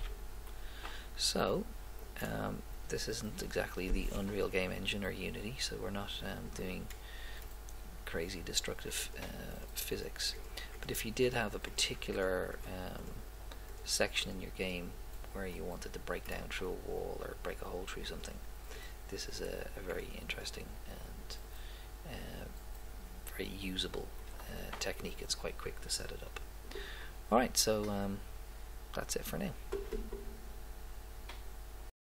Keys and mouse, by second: 5.0-6.6 middle drag, 6.9 middle click, 7.7 middle click.